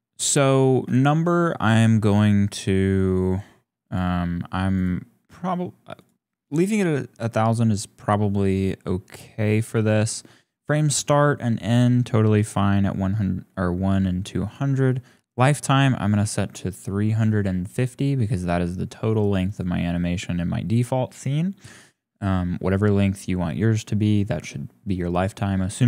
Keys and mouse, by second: 0.2 click, 1.0 shift+click, 3.8 click, 4.8-9.5 drag, 14.5-17.1 drag, 19.6 click.